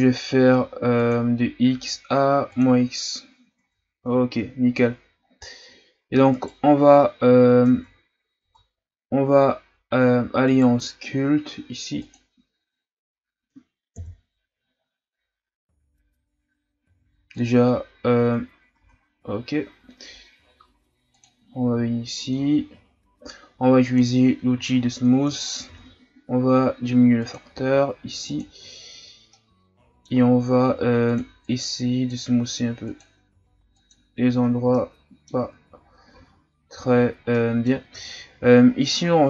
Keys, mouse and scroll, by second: 3.6 Tab, 4.1 a, 4.8-5.2 scroll up 4, 5.2 scroll down 2, 6.3 right click, 7.7 Tab, 8.4 Tab, 10.4 right click, 12.3 click, 14.0 KP_1, 14.7-16.2 scroll up 6, 17.5 click, 18.2 Tab, 18.8 Tab, 21.3 click, 21.9-23.9 shift+scroll up 13, 23.9 click, 24.7-25.7 shift+scroll up 4, 25.7 shift+f, 27.5 f, 29.3-30.6 middle drag, 30.6 f, 31.4-34.5 drag, 34.5 scroll down 1, 34.8 middle click, 35.7 ctrl+z, 36.2 ctrl+z, 37.3 middle click, 38.1-38.7 shift+scroll down 5, 38.7 scroll down 1.